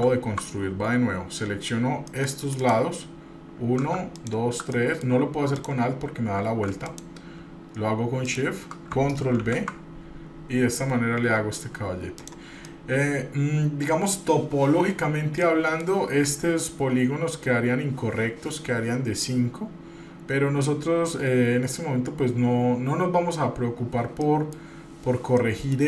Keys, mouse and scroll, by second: 0.0 ctrl+z, 2.3 middle click, 2.8 click, 4.3 alt+click, 4.9 middle click, 5.7 click, 6.9 shift+click, 8.4 shift+click, 9.6 ctrl+b, 12.9-14.4 middle drag, 15.6 middle click, 24.4 middle click, 25.1 scroll up 2, 25.6 middle click.